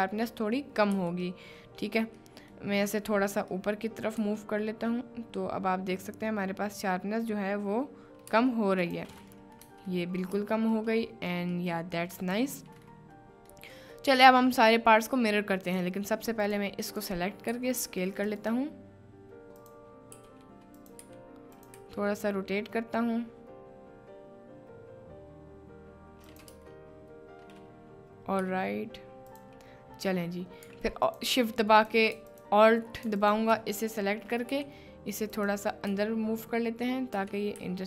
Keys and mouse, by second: 0.9 KP_Decimal, 1.4 middle click, 1.9 click, 2.3 click, 2.9 click, 3.5 click, 5.1 g, 8.3 Down, 9.3 click, 10.0 click, 10.3 Tab, 10.9 middle click, 11.7 middle drag, 13.0-13.5 middle drag, 13.9 middle click, 14.7 middle click, 15.6 click, 16.4 click, 16.9 click, 17.5 s, 18.4-19.8 drag, 20.1 s, 20.8 click, 21.0 g, 21.6 click, 21.9 r, 26.3 middle click, 26.6 Tab, 28.4 g, 29.3 click, 31.1 alt+click, 32.4 alt+click, 33.2 alt+click, 33.3 alt+shift+middle click, 33.9 shift+middle click, 34.1 shift+click, 34.8 g, 35.3 click, 35.9 Tab, 37.1 Tab, 37.6 g.